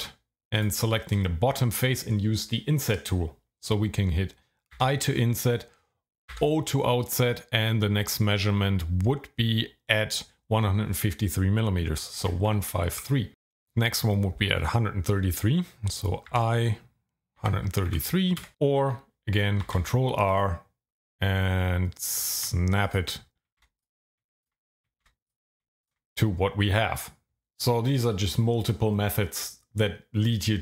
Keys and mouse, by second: 0.0 shift+z, 4.8 i, 6.3 o, 12.2 KP_1, 12.5 KP_5, 12.9 KP_3, 16.3 i, 17.4 KP_1, 17.6 KP_3, 17.9 KP_3, 18.4 KP_Enter, 19.6 ctrl+r, 20.2 click, 22.8 ctrl+click, 23.6 ctrl+r, 23.8 click, 24.4 ctrl+click, 25.0 ctrl+r, 25.3 click, 25.8 ctrl+click.